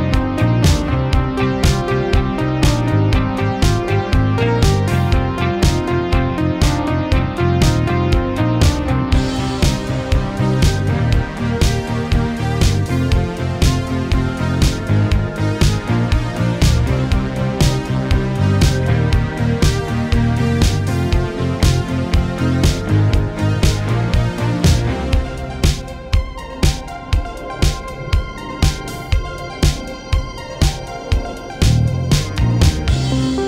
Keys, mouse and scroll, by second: 3.2 right click, 4.3 click, 5.8 right click, 6.8-7.5 drag, 9.0 Tab, 10.3 click, 13.0-13.7 typing, 15.2 space, 17.5-18.1 drag, 20.4-21.0 click, 20.9 space, 23.0 click, 24.4 ctrl+click, 29.1-33.4 drag, 32.5-33.4 drag.